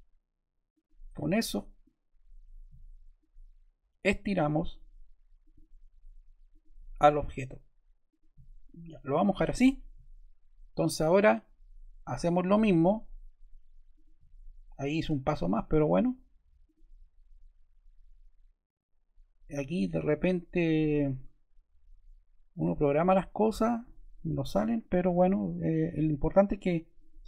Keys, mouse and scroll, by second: 16.5 click, 24.7 click, 25.5 click.